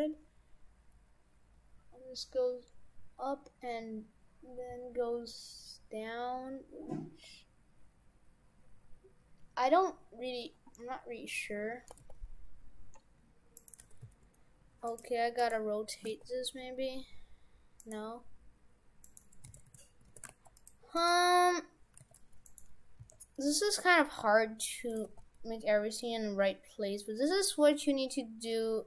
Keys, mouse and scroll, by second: 11.1 Tab, 11.9 r, 13.9 shift+f, 15.1 Tab, 15.4 right click, 16.1 r, 19.1 right click, 19.5 shift+f, 20.1 shift+f, 21.0 right click, 21.9 g, 23.0 s.